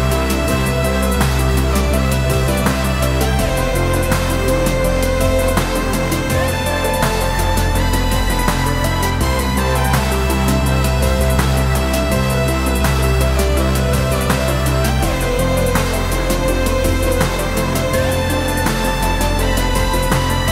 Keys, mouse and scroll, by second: 3.6 click, 4.2 click, 4.9-7.9 drag, 8.9 click, 10.9 click, 11.2-19.5 drag, 19.8-20.5 middle drag.